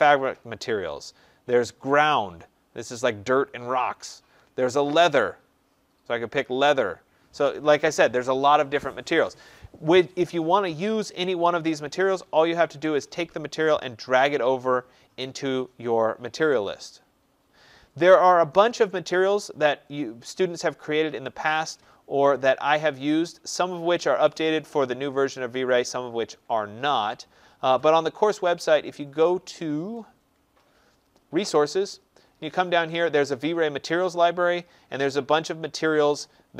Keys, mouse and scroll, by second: 0.2 middle click, 1.6 click, 4.7 click, 6.4 click, 15.1 click, 21.3 click, 24.1 click, 25.6 click, 26.2 scroll, 27.8 click, 29.1-30.5 scroll, 29.4 middle click, 29.8 middle click, 35.7-36.3 scroll.